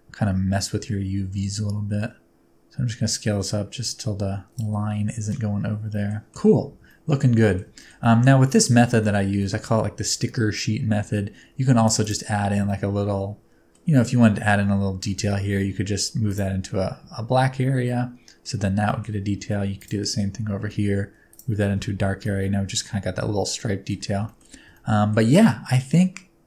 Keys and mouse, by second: 0.1 s, 4.5 click, 5.2 middle click, 6.3 s, 6.5 Tab, 6.8-7.5 middle drag, 7.7 shift+middle click, 7.9 middle drag, 8.5 middle drag, 8.9 middle click, 9.3 shift+middle click, 10.8 Tab, 11.6 3, 12.0 alt+click, 12.6-13.7 middle drag, 15.1 g, 16.2 middle click, 17.8 middle click, 18.8 shift+middle click, 20.6 g, 21.2 click, 21.7 Tab, 22.4-22.8 middle drag, 23.5-23.9 middle drag, 24.3 shift+middle click, 24.8-25.2 ctrl+middle drag, 25.7-26.4 middle drag.